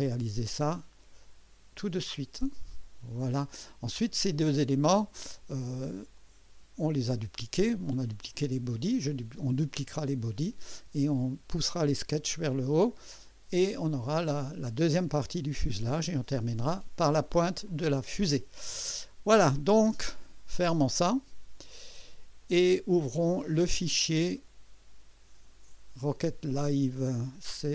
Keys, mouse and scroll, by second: 0.6-4.0 drag, 6.1 click, 8.9 scroll down 2, 9.4-10.2 right drag, 20.9 click, 22.4 click, 24.3 click.